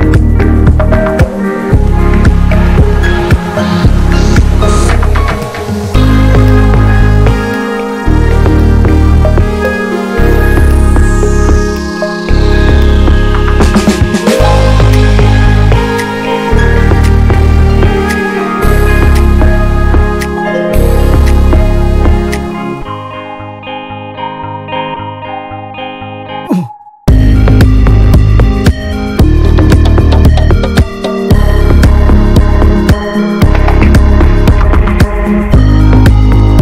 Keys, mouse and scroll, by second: 0.0 alt+z, 0.2 alt+middle click, 0.4 scroll down 2, 0.6 Tab, 0.7 middle click, 1.0 ctrl+s, 1.2 Tab, 1.3 scroll up 5, 1.5 middle click, 2.3 ctrl+r, 3.4 Tab, 3.5 scroll down 2, 3.6 alt+middle click, 4.0 Tab, 5.0 click, 5.3 l, 5.7 click, 6.3 alt+middle click, 6.6-7.4 scroll down 3, 6.8 Tab, 7.4 ctrl+s, 7.5 Tab, 7.7-8.2 scroll up 3, 8.2 click, 8.6 s, 10.0 scroll down 4, 10.3 Tab, 10.6 scroll up 2, 10.7 middle click, 11.3 ctrl+s, 11.5 3, 11.7 click, 12.1 Tab, 12.2 click, 12.4 ctrl+a, 12.7 ctrl+s, 12.9 `, 13.9 3, 14.0 click, 14.3 alt+middle click, 14.4 alt+middle click, 14.6 alt+middle click, 14.9 alt+z, 15.1 alt+middle click, 15.4 scroll up 1, 15.7 ctrl+s, 15.8 scroll down 1, 15.9 a, 16.5 click, 16.8 l, 17.5 r, 18.6 middle click, 18.8 alt+z, 19.0 click, 19.1 scroll down 1, 19.3 alt+middle click, 19.7 alt+middle click, 20.0 alt+middle click, 20.3-20.8 scroll up 2, 20.8 click, 21.4 ctrl+z, 21.6-22.0 scroll down 1, 22.0 s, 23.3 alt+middle click, 23.5 alt+z, 23.7-24.2 scroll down 1, 24.2 scroll down 3, 24.3 s, 24.8-25.4 scroll down 3, 24.9 Tab, 25.1 click, 25.4 shift+middle click, 25.8 ctrl+s, 26.0 Tab, 26.1-26.8 scroll up 2, 26.3 shift+middle click, 26.8 click, 27.1 l, 27.7 s, 28.3 ctrl+s, 29.2 scroll down 4, 29.4 click, 29.6 scroll up 4, 29.7 ctrl+s, 29.9 click, 30.1 Tab, 30.5 click, 30.8 l, 31.0 scroll down 3, 31.3 alt+middle click, 31.5 alt+middle click, 32.0 scroll up 2, 32.2 shift+middle click, 32.6 ctrl+s, 33.9 r, 34.7 alt+middle click, 35.2-36.2 scroll down 1, 36.2 alt+middle click.